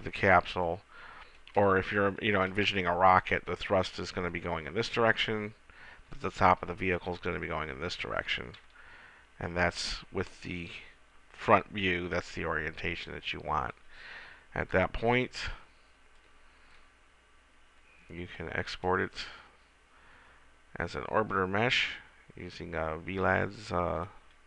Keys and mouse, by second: 9.3 KP_1, 17.2-19.0 middle drag.